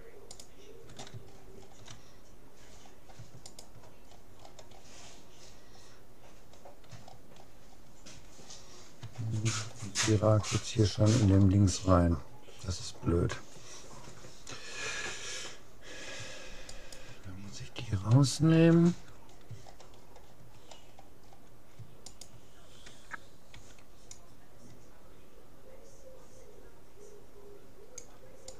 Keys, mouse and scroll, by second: 1.9-3.5 middle drag, 3.5-5.1 right drag, 4.1 middle click, 5.1-6.7 middle drag, 7.1-13.1 middle drag, 9.3-10.5 scroll down 1, 16.7-18.3 right drag, 18.3-20.7 middle drag, 20.7-21.1 scroll up 1, 21.1-22.1 middle drag, 22.1-23.9 right drag, 23.5 c.